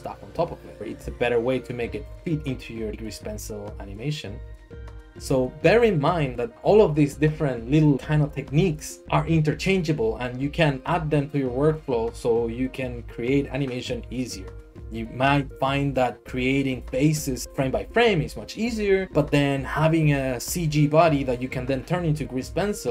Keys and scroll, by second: 0.8 Escape.